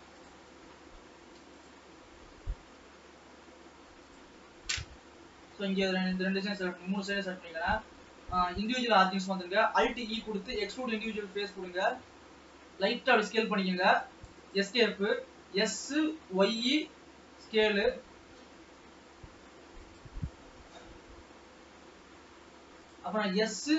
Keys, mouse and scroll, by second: 0.5 click, 1.6 shift+click, 2.3-4.2 middle drag, 4.2 shift+click, 4.8-5.8 shift+middle drag, 5.8-6.5 scroll down 1, 6.5-7.3 scroll down 1, 7.3-9.7 drag, 9.7 alt+e, 10.8 alt+e, 11.8 s, 15.2 s, 20.5 g, 23.6 s.